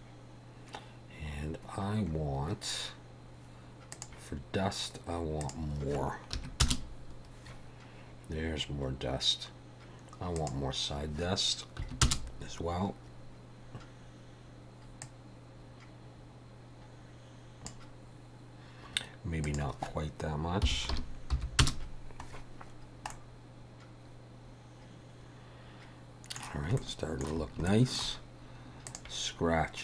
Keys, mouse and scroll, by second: 2.2-2.7 scroll up 4, 4.0 click, 5.5 click, 10.5 click, 15.1 click, 19.5 click, 22.9 scroll down 2, 23.1 middle click, 26.8 shift+middle click, 27.7 shift+middle click, 28.9 click.